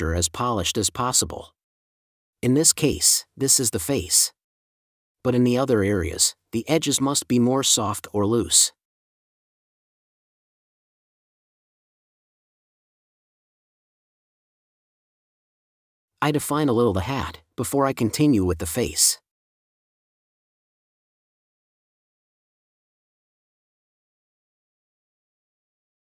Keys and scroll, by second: 2.1 space, 5.7-6.5 typing, 11.9 1, 14.1 4, 18.0 space, 22.8 super+space, 23.1 super+space.